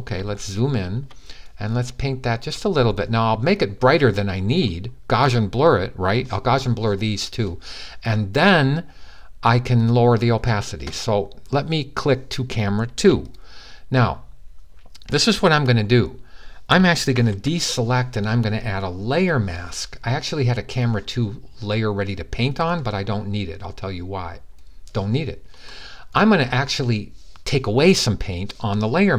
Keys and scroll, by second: 16.9 super+d.